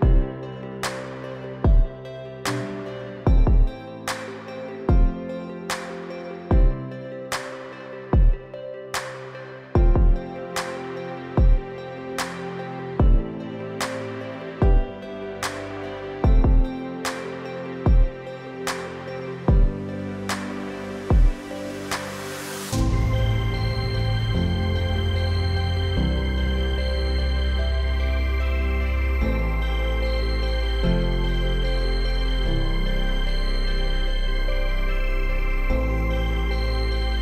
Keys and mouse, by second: 0.2 ctrl+z, 0.3-0.9 typing, 0.5 click, 0.8 ctrl+z, 1.0 middle click, 2.6 middle click, 3.1 middle click, 4.6 middle click, 4.9 shift+middle click, 7.1 click, 7.9 click, 8.7-9.4 drag, 9.8 shift+middle click, 10.1 shift+middle click, 12.0-13.7 drag, 13.9-15.5 drag, 15.5 ], 15.7 click, 16.1 [, 16.2 [, 16.6 [, 16.7 ctrl+z, 16.8-18.1 drag, 18.6 ctrl+z, 18.6 ], 18.8 ], 18.8 ], 18.9 click, 19.5 click, 20.1 ctrl+z, 20.3 ], 21.0 [, 21.5 [, 22.2 click, 22.6 click, 23.3 ctrl+z, 23.3 click, 23.3-28.2 typing, 23.6 ctrl+z, 24.2 click, 25.5 click, 25.9 ctrl+z, 26.1 click, 26.4 ctrl+z, 26.5 click, 27.1 ctrl+z, 27.2 click, 28.1 ctrl+z, 28.2 click, 28.6 ctrl+z, 28.6 click, 29.5 ctrl+z, 29.5 click, 29.8 ctrl+z, 29.9 click, 30.5 ctrl+z, 30.5 click, 31.0 [, 31.0 click, 32.0-33.6 typing, 32.2 click, 32.6 ctrl+z, 32.8 click, 33.2 click, 33.6 click, 34.5 ctrl+z, 34.8 ctrl+z, 35.1 ctrl+z, 35.1 click, 36.0 ctrl+z, 36.0 [, 36.2 [, 36.3 [, 36.3 ].